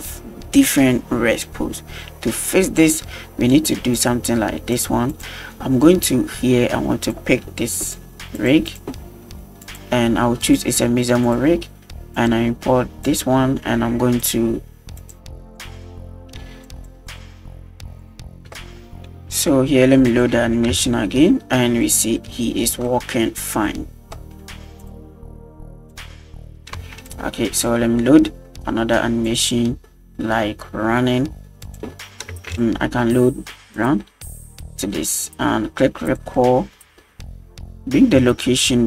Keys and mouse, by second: 4.0 click, 4.7 click, 5.1 click, 7.0-8.4 drag, 8.7 click, 9.6 click, 10.4-11.4 drag, 12.2 click, 13.1 click, 14.2-15.6 drag, 15.2 alt+r, 16.6 click, 17.1 click, 18.0 click, 18.6 shift+middle drag, 20.1-20.4 drag, 20.7 space, 21.8 click, 22.2 middle click, 22.9 middle click, 23.5 click, 24.3 middle click, 24.8 click, 25.9 click, 26.8 space, 27.1 click, 29.2 click, 31.6-33.9 drag, 32.6 n, 34.4 click, 36.1 click, 36.4-37.0 middle drag, 38.4-38.8 shift+drag.